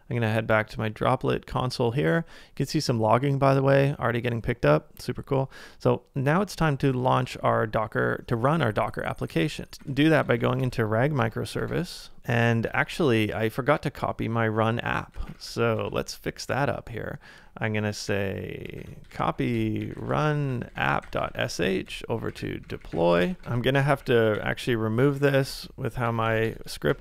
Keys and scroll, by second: 6.4 super+Tab, 9.1-10.9 typing, 12.6-13.4 typing, 15.0-20.5 typing, 21.9-23.9 typing.